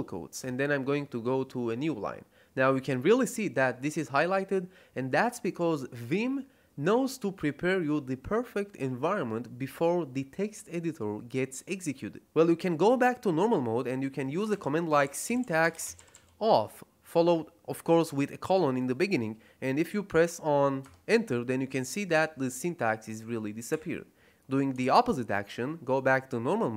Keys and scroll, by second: 0.3 Return, 14.2-16.6 typing, 20.7 Return, 23.6 Escape, 24.7 shift+;.